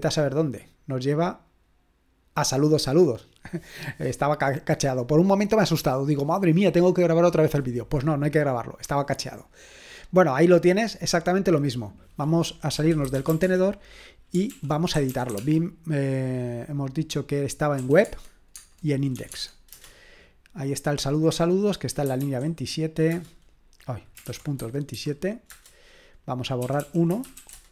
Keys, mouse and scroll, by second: 1.5 click, 10.0 click, 11.9 click, 12.5-15.8 typing, 14.5 ctrl+l, 17.8 typing, 18.0 Tab, 18.6 Tab, 19.1 i, 19.3 Tab, 19.7 Return, 21.8-22.7 typing, 23.1 Return, 24.0-27.7 typing.